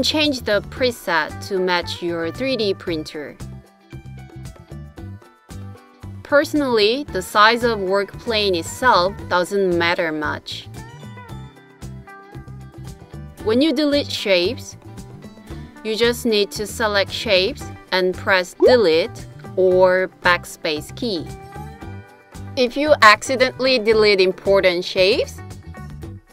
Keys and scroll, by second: 16.5 BackSpace, 19.4 BackSpace, 23.9 super+z, 26.2 BackSpace.